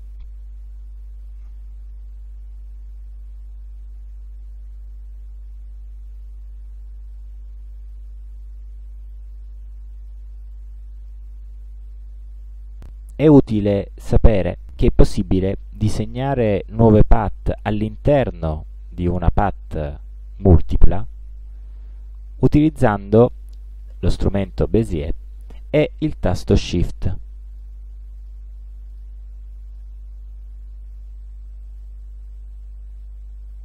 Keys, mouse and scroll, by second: 1.3 click, 6.2 click, 8.0-9.4 drag, 10.2-10.8 drag, 24.8 click, 27.6 shift+click, 28.2 shift+click, 29.0 shift+click, 29.8 shift+click, 31.0 shift+click, 33.2 shift+click.